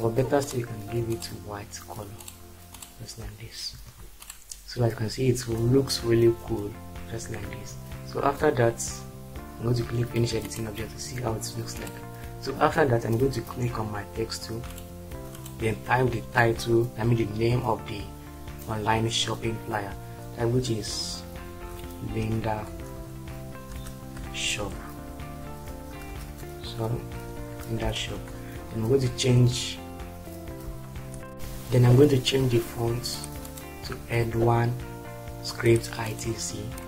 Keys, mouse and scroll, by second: 3.7 shift+F4, 21.6-22.9 typing, 23.6 Return, 24.4-25.9 typing, 27.1 h, 28.0 ctrl+space.